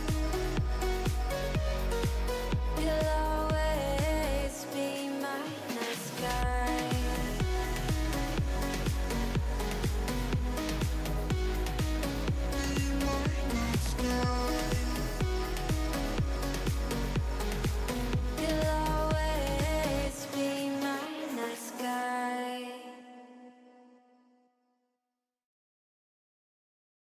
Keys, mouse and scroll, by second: 0.9 s, 1.6 scroll down 6, 2.3 KP_1, 4.2 g, 5.7 shift+middle click, 5.9-6.7 scroll up 8, 6.7 g, 7.5 r, 9.6 KP_3, 9.8-10.4 scroll down 12, 10.4 s, 14.3 KP_1, 14.5-15.2 scroll up 13, 15.2 scroll down 2, 15.3 shift+middle click, 15.6 scroll up 1, 15.9 g, 18.3-19.3 middle drag, 19.3 g, 20.3-21.1 scroll down 9, 20.6 click, 21.1 Tab, 21.6-23.0 drag, 24.5 KP_1, 24.8-26.1 scroll up 8, 26.1-27.1 drag.